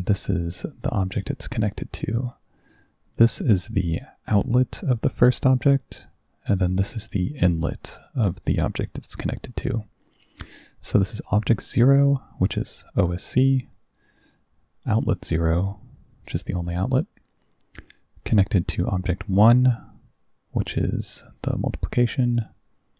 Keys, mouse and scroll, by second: 0.0-1.3 drag, 2.4 click, 6.6 click, 10.1 click, 11.2 click, 14.2 click, 17.9 click, 22.5 click.